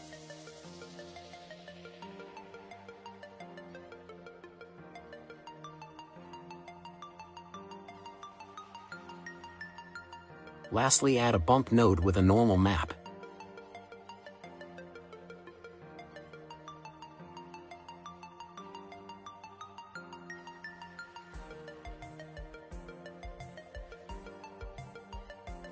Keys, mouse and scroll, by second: 0.4-2.8 drag, 3.5 click, 3.9 shift+s, 6.0 shift+a, 11.1 click, 12.5 drag, 18.2-19.7 scroll down 7, 19.7-22.2 scroll down 3, 22.2-22.8 middle drag, 22.8-23.9 scroll up 10, 23.9-25.7 scroll up 2.